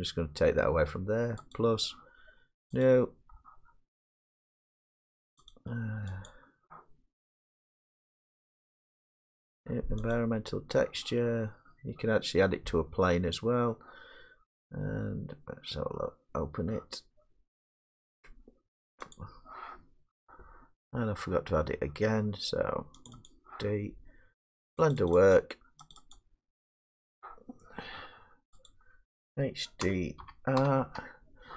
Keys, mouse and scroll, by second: 1.6 click, 2.9 click, 6.3 click, 10.2 click, 19.2-21.5 drag, 23.1 click, 23.3 click, 25.0 click, 25.1 click, 25.4 click, 26.0 click, 26.7 click, 28.7 click, 29.8-30.6 typing.